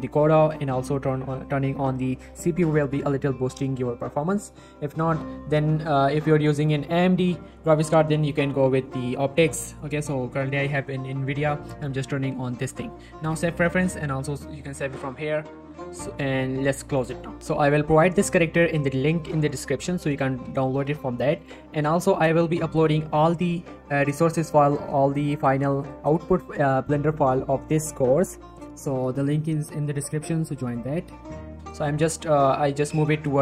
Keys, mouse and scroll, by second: 2.2 click, 8.2 click, 13.3-18.0 drag, 19.6 middle click, 20.3 g, 20.6 z, 21.4 click, 21.6 middle click, 25.2 right click, 25.7 middle click, 26.5 g, 26.7 right click, 31.0 right click, 31.3 y, 32.0 right click, 32.5 scroll up 1, 32.9 middle click, 33.3 g.